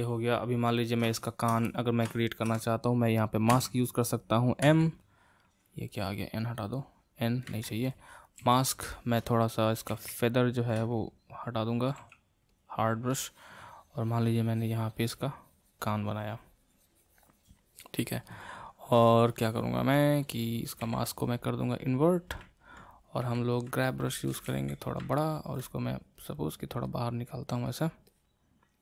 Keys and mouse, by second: 3.5 n, 4.6 m, 7.4 n, 8.4 f, 9.9 shift+f, 12.0 f, 13.1-16.2 drag, 20.8 a, 23.2 g, 23.8 middle click, 24.4 f, 25.1 middle click, 25.8-28.8 drag.